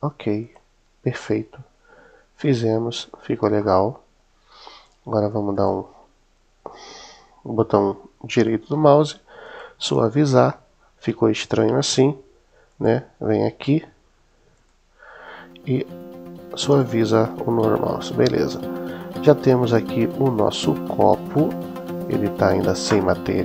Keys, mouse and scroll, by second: 0.2 click, 1.9 Tab, 3.4-4.7 middle drag, 5.5 right click, 12.6 click, 16.5 click, 17.6-18.5 middle drag, 21.2-22.2 middle drag.